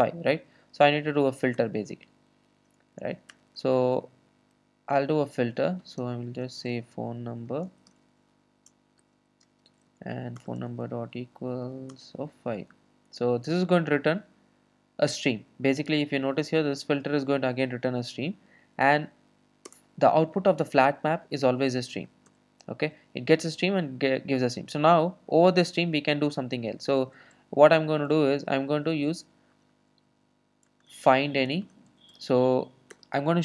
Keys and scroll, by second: 1.6 Return, 10.4 Return, 32.9 Return.